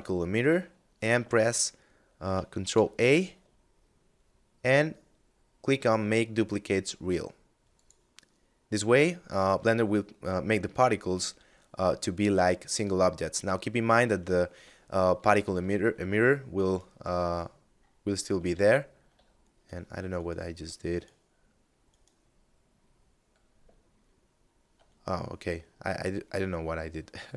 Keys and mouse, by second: 1.7 ctrl+a, 6.9 click, 11.6 right click, 14.5 alt+s, 15.7 right click, 17.6 ctrl+z, 18.3 ctrl+z, 19.2 right click, 24.8 middle click.